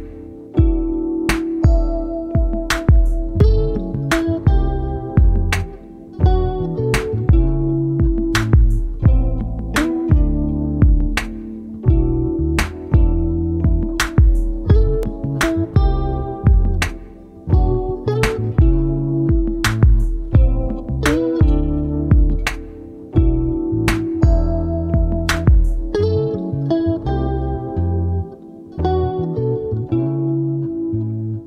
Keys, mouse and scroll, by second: 3.9 ctrl+shift+g, 4.6 click, 5.5 click, 6.5 click, 8.2 ctrl+d, 9.1 click, 10.3-12.9 drag, 13.6-14.8 ctrl+shift+drag, 15.6-17.3 ctrl+shift+drag, 17.8-18.2 ctrl+scroll up 2, 19.5 ctrl+shift+click, 21.0-23.9 shift+drag, 24.0 ctrl+scroll down 2, 25.8 ctrl+d, 26.6 click, 27.8-31.4 ctrl+drag.